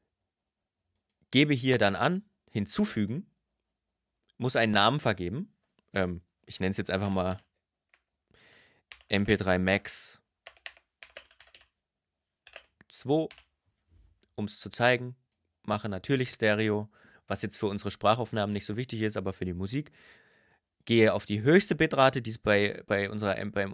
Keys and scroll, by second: 6.6 shift+m, 7.5 BackSpace, 8.7-12.9 typing.